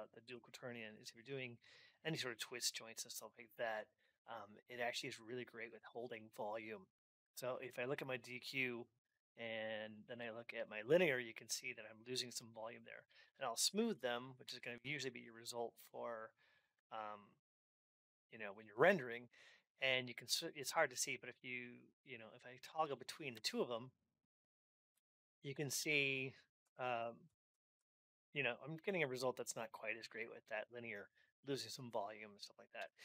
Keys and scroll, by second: 14.2 alt+x, 20.1 alt+x.